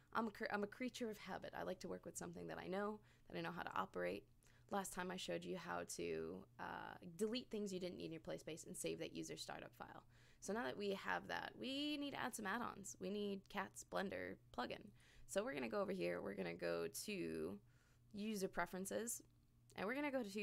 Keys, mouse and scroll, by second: 4.7 click, 14.9 click.